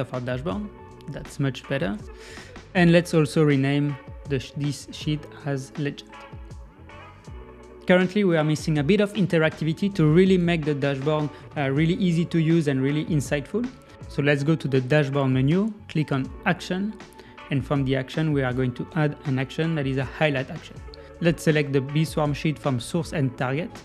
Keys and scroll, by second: 6.5 Return.